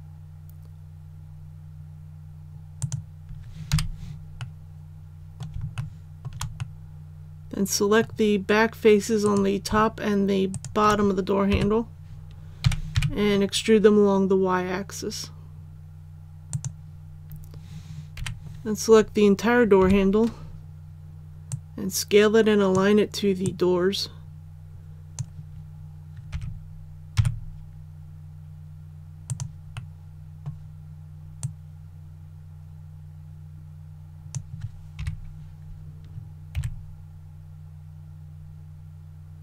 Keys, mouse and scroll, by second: 2.7 click, 3.7 click, 4.3 middle click, 5.7 shift+middle click, 6.5-8.6 middle drag, 9.2 right click, 10.5 shift+right click, 11.5 KP_3, 12.6-12.9 typing, 16.5-17.6 drag, 18.1 l, 19.8 KP_1, 21.5-25.6 drag, 26.3 s, 27.1 x, 29.2 click, 29.7 middle click, 31.4-34.6 drag, 34.9 KP_1, 36.5 s.